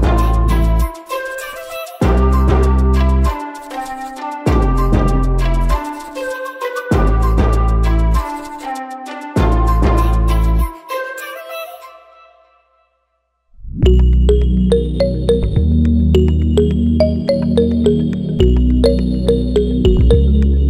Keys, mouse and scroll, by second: 0.4 click, 1.7 click, 2.6 click, 2.8-3.5 scroll up 2, 3.5 click, 5.0 click, 5.3 click, 6.1 click, 7.5 click, 8.0 click, 8.2-10.4 drag, 10.9 click, 11.2 scroll down 1, 12.2 click, 12.5 scroll up 2, 13.2-13.8 drag, 13.8-14.2 scroll up 1, 14.5 click, 16.0 s, 18.5 click, 19.0 click, 19.2-19.9 drag, 20.3-20.6 drag.